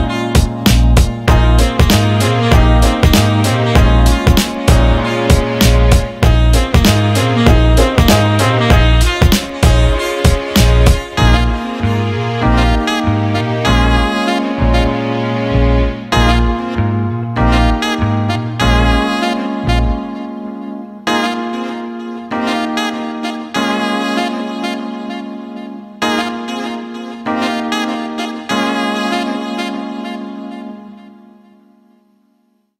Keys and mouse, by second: 0.4 shift+click, 1.8 j, 3.7 click, 4.7 g, 9.6 click, 10.5 g, 13.7-21.5 ctrl+middle drag, 21.5 a, 23.6-25.6 drag, 25.6 Tab, 27.4-28.3 drag, 28.3-31.4 middle drag, 31.5-32.7 right drag.